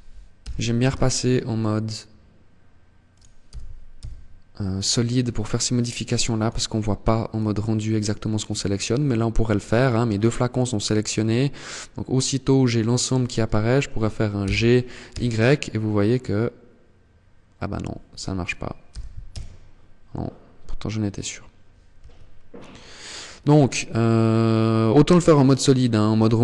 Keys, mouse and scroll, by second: 2.3 click, 2.5 g, 4.5 click, 5.3 click, 13.2 g, 26.0 middle click.